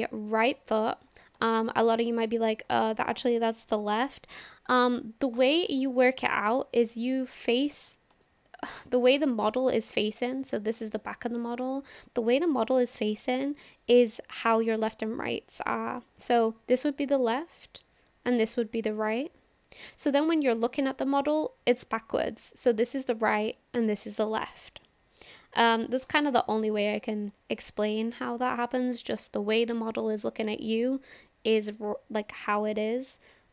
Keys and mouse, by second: 1.5 shift+middle drag, 1.9-2.5 middle drag, 2.8-3.1 shift+middle drag, 6.0-7.8 middle drag, 8.2-8.7 shift+middle drag, 9.1-9.9 shift+middle drag, 10.2-11.4 shift+middle drag, 11.8-12.7 shift+middle drag, 13.8 click, 19.9-21.3 middle drag, 27.6-28.0 shift+middle drag, 28.2-28.9 middle drag.